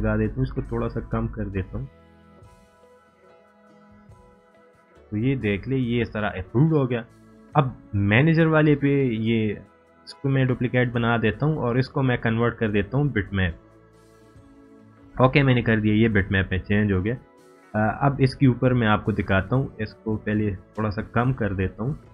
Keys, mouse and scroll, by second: 4.7 scroll up 1, 6.2 scroll down 1, 9.1-9.8 click, 10.3 right click, 12.0-17.6 drag.